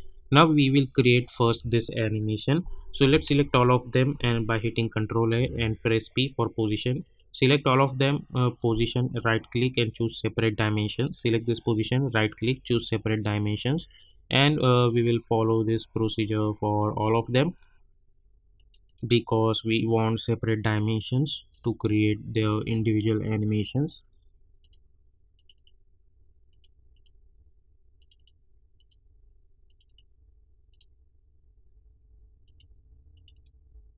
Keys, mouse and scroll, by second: 3.0 ctrl+Num_Lock, 3.0 click, 3.2 ctrl+a, 5.4 p, 7.0 click, 7.7 right click, 9.0 click, 11.6 right click, 12.4 click, 12.9 scroll down 1, 13.7 click, 13.9 right click, 14.7 click, 15.6 right click, 16.6 click, 17.0 scroll down 1, 18.5 click, 18.8 right click, 19.6 click, 20.8 right click, 21.5 click, 21.9 scroll down 1, 22.5 scroll up 1, 23.6 click, 24.2 right click, 24.6 click, 27.2 scroll down 1, 27.9 click, 28.1 right click, 28.7 click, 31.0 scroll down 1, 32.4 click, 33.3 right click.